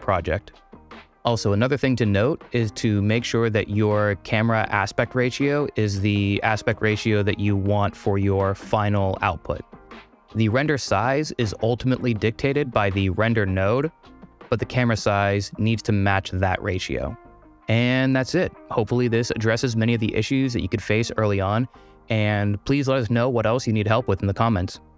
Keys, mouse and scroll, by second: 1.5 middle drag, 2.1-3.3 middle drag, 3.3 click, 11.5 click, 17.5 middle click.